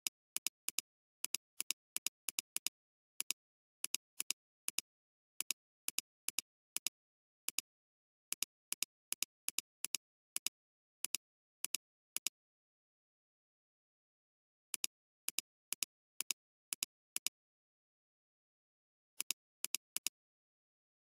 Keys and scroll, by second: 3.3 space, 6.7 space, 13.9 ctrl+z.